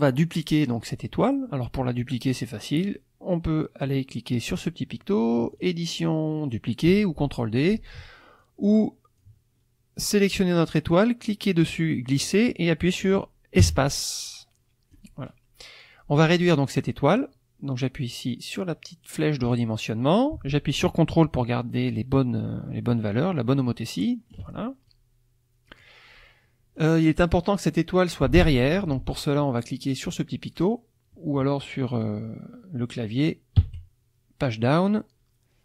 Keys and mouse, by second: 0.1-0.9 drag, 5.5 click, 7.6 click, 8.4-9.4 drag, 10.0-15.1 drag, 13.6 space, 16.7-17.3 drag, 19.5-24.5 drag, 24.9-26.0 ctrl+drag, 26.7-27.7 drag, 33.6 Page_Down.